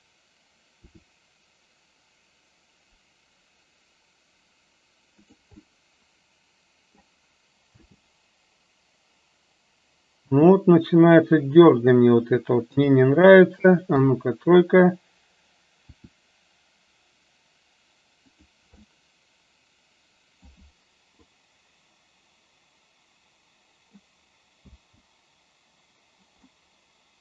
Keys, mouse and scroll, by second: 0.7 r, 5.7-7.1 middle drag, 7.8 space, 10.3 space, 11.6-12.0 drag, 12.7 KP_3, 14.0 KP_1, 15.8 r, 19.0-20.5 middle drag, 21.3-24.1 drag, 24.7 space, 26.7-27.2 middle drag.